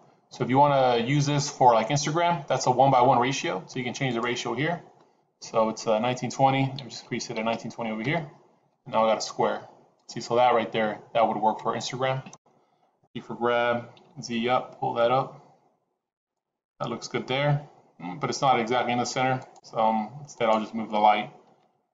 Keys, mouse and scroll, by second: 4.0 click, 9.3 scroll down 3, 13.0 g, 19.5 click, 20.4 click, 21.6 g.